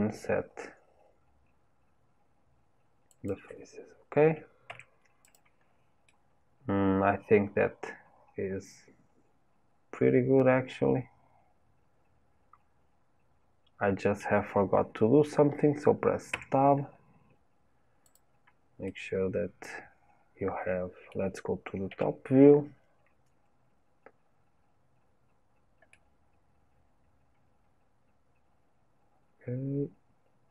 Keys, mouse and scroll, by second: 4.7 Tab, 5.2 click, 5.6-6.1 scroll down 2, 6.1-9.1 middle drag, 16.3 Tab, 18.0 click, 18.8-21.8 middle drag, 21.8 KP_7, 22.9-23.5 scroll up 2, 23.9-25.2 scroll up 1, 25.2 scroll up 1, 25.9-29.0 middle drag.